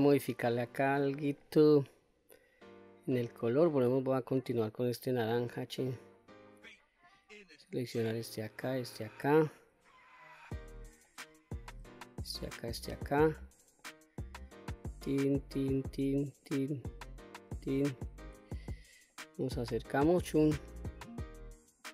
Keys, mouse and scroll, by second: 1.0 Tab, 1.4-3.2 scroll up 2, 3.4-3.7 shift+middle drag, 5.2 click, 5.9 shift+click, 7.1 shift+click, 7.7 shift+click, 8.3 shift+click, 9.0 shift+click, 9.6-10.8 middle drag, 11.1 middle click, 12.2 shift+click, 12.5 shift+click, 13.5-13.9 shift+middle drag, 14.7 shift+click, 15.3 shift+click, 15.8 shift+click, 16.4 shift+click, 17.2 shift+click, 18.0-18.4 scroll up 2, 18.7-19.2 shift+middle drag, 20.0 shift+click, 20.8 shift+click, 21.7 shift+click.